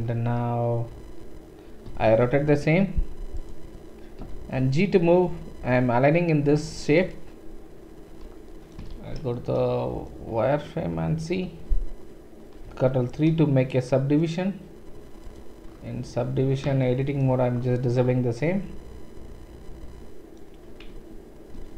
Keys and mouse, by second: 1.9 r, 4.2 g, 8.7-9.5 shift+right drag, 8.9 shift+z, 9.6 right click, 9.7 right click, 9.9 middle click, 10.1-16.9 right drag, 12.7 ctrl+3, 15.2 click, 15.2 middle click, 17.0 shift+middle click, 17.3-21.7 middle drag, 20.9 Tab, 21.5 Tab.